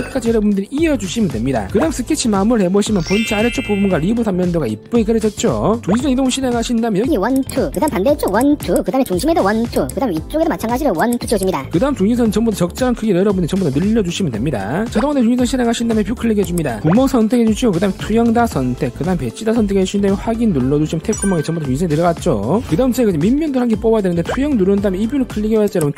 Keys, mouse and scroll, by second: 0.1 v, 0.6 click, 1.3 click, 2.3 click, 3.0-3.6 scroll up 2, 3.9 click, 6.7 click, 7.1 scroll up 1, 7.5 click, 8.0 middle click, 8.5 click, 8.9 click, 9.5 click, 10.0 click, 10.1 scroll down 1, 10.3 middle click, 11.1 click, 11.6 click, 12.1 click, 13.6 click, 16.2 click, 16.9 click, 18.8 click, 19.6 click, 20.2 click, 21.3 click, 25.1 click, 25.8 click.